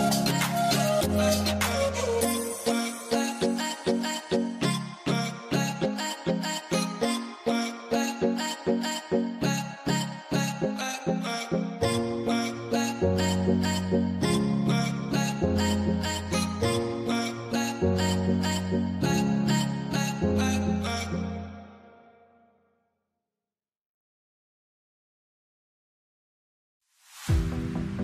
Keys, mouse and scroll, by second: 18.0 right click, 18.1 scroll down 1, 19.3 alt+q, 20.3 alt+q, 20.8 right click, 21.7 middle click, 21.9 scroll down 1, 22.2 middle click, 22.5 z, 22.7 z, 23.0 scroll down 1, 23.3 middle click, 25.7 ctrl+click, 26.1 alt+q.